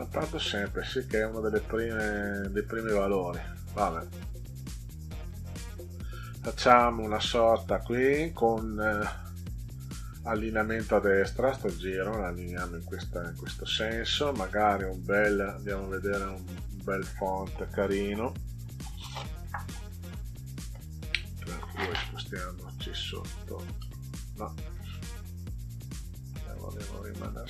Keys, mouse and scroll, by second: 0.6 click, 0.9 click, 1.0 click, 1.2 click, 1.5 click, 1.7 click, 1.9 click, 2.1 click, 2.3 click, 2.4 click, 2.7 click, 2.9 click, 3.1 click, 3.3 click, 3.5 click, 3.7 click, 3.9 click, 4.1 click, 4.8 click, 5.0 click, 5.5 click, 5.7 click, 5.9 click, 6.1 click, 6.3 click, 6.5 click, 6.7 click, 7.0 click, 11.5 click, 14.5 click, 15.7 click, 22.1 Down, 22.9 Down, 23.7 Down, 26.5 click.